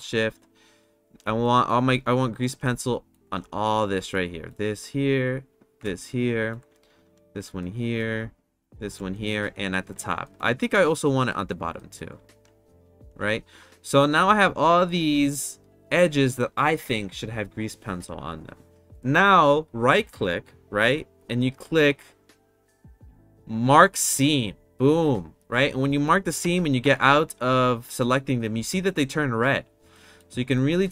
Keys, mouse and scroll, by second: 0.7 alt+shift+click, 1.4 middle click, 2.2 alt+shift+click, 2.7 middle click, 3.7 alt+shift+click, 4.1 middle click, 5.9 middle click, 7.5 middle click, 8.5 alt+shift+click, 9.1 middle click, 10.2 middle click, 10.8 middle click, 11.2 middle click, 11.7 middle click, 12.5 alt+shift+click, 20.5-25.0 right drag, 26.4 Tab, 26.8 Tab, 28.1 middle click, 29.9 middle click, 30.5-30.9 middle drag.